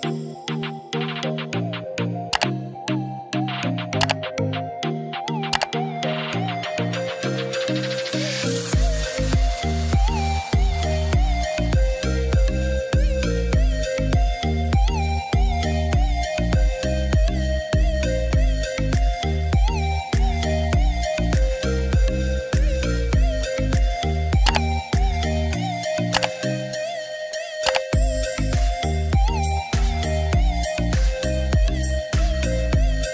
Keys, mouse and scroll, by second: 3.8-7.2 drag, 9.6 click, 10.5 ctrl+d, 11.3 click, 18.9 click, 24.6 click.